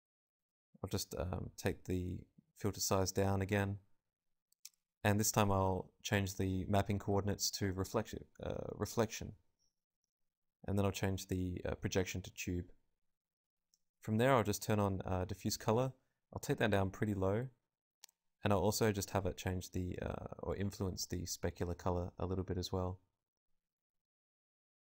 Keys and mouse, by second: 0.2-1.7 drag, 4.2-6.7 drag, 7.5-13.2 drag, 14.0-20.3 drag, 20.6 click, 23.3-24.8 drag.